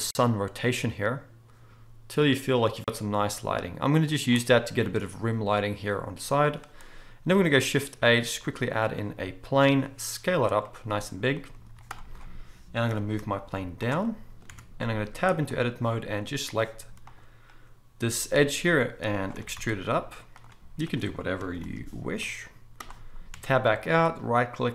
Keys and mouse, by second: 7.3 shift+a, 9.6 s, 10.5-16.5 middle drag, 11.7 z, 12.9 g, 14.5 Tab, 16.5 click, 17.1-20.9 middle drag, 18.0 g, 19.3 e, 20.9 click, 21.0-23.8 middle drag, 21.6 ctrl+b, 23.3 Tab, 23.8-24.7 right drag, 24.5-24.7 middle drag.